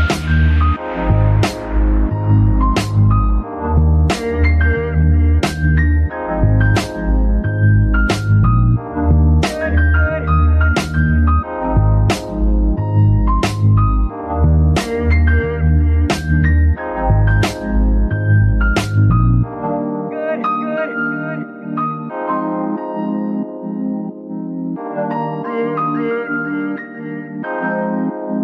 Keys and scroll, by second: 7.1 g, 9.7 Escape, 10.4 alt+g, 11.1 g, 11.2 y, 12.5 r, 14.3 Escape, 14.9 alt+r, 15.5 alt+g, 22.2 s, 22.3 x, 26.5 s, 27.5 Escape, 28.1-28.4 typing.